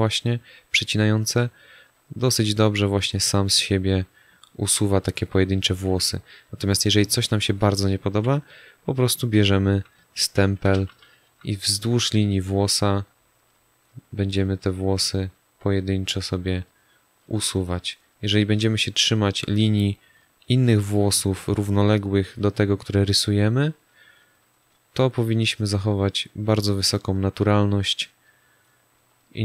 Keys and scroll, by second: 7.0 space, 8.0 s, 10.3 0.